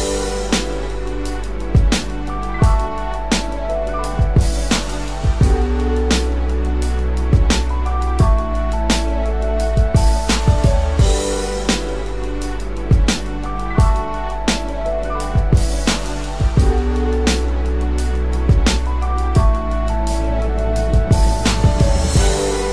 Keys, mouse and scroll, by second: 0.0 ctrl+alt+shift+e, 0.0 ], 5.0 typing.